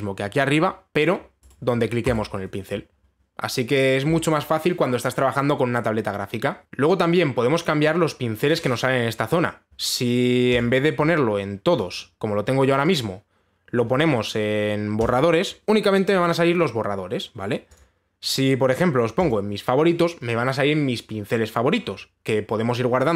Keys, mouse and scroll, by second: 0.0 click, 2.1 right click, 2.7 right click, 11.2 click, 12.4 click, 13.5 click, 15.6 click, 18.4 click, 19.9 click.